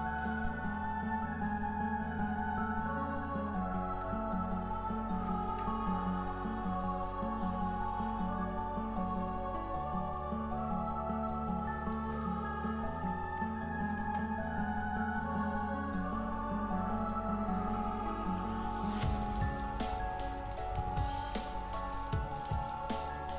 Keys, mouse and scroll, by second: 1.8-2.2 scroll down 1, 2.2 scroll up 1, 2.6 ctrl+click, 3.4-4.0 scroll up 1, 4.0 shift+scroll up 1, 4.1-14.0 shift+drag, 14.0 ctrl+z, 15.1-15.5 scroll down 1, 15.9-16.4 scroll up 1, 16.4-23.3 drag.